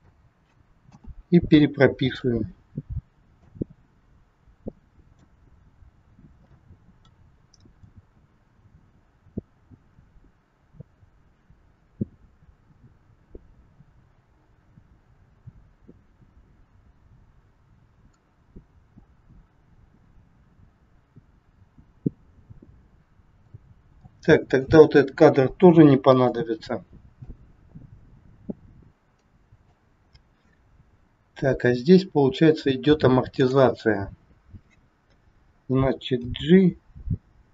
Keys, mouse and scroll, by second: 0.8 a, 1.4 i, 3.4 click, 5.6-6.3 scroll down 2, 6.5 middle click, 7.9 click, 24.0 click, 25.5 Delete, 27.1 click, 30.7-31.9 scroll up 2, 33.3 click, 33.9 scroll down 1, 36.1 scroll down 1, 36.1 g.